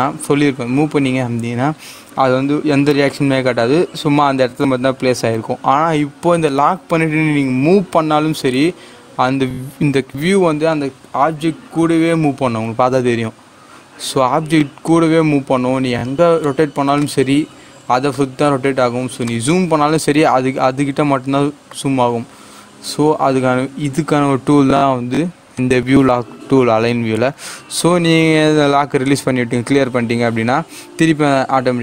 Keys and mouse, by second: 7.2 g, 14.8-23.9 drag, 25.5 click, 29.0 click.